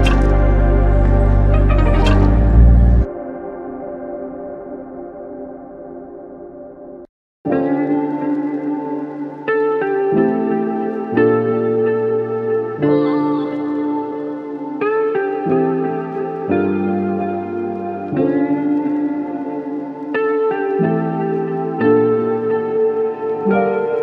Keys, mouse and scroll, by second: 3.5 alt+click, 6.2 alt+click, 12.8 f, 14.0 double click, 22.4 alt+click.